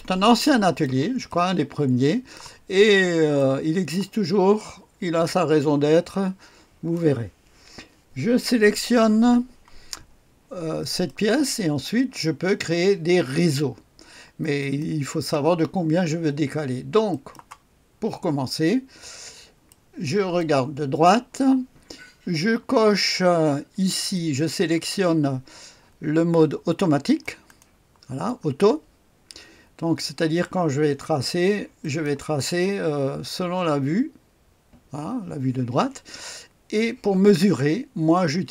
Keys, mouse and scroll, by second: 0.4 click, 1.3-2.4 middle drag, 2.9-3.4 scroll up 1, 3.4 middle click, 4.6 middle click, 4.7-7.2 drag, 10.9 click, 14.6 click, 17.1 click, 19.0-19.7 scroll up 1, 19.7 right click, 24.1-27.9 drag, 31.8 click.